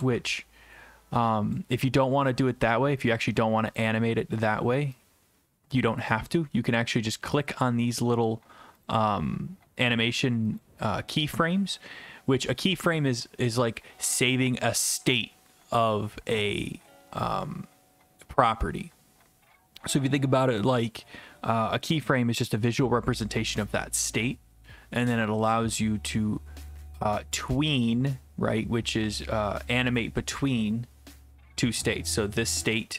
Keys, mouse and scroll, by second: 1.5 ctrl+click, 3.1 right click, 3.8 click, 6.3 click, 7.4 click, 31.8 click, 32.6 click.